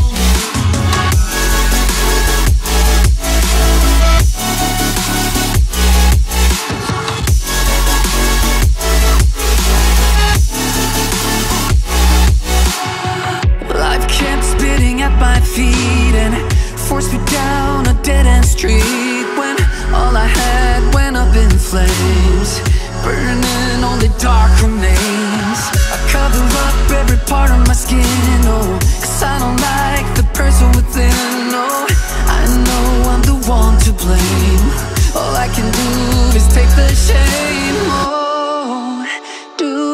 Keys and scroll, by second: 0.6 ctrl+z, 8.8 ctrl+shift+], 10.8 ctrl+z, 29.8 ctrl+z, 39.1 ctrl+-.